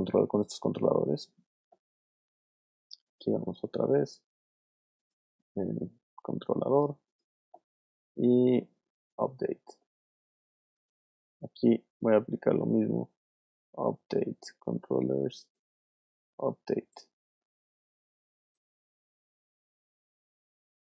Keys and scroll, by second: 18.1 space, 19.7 super+z.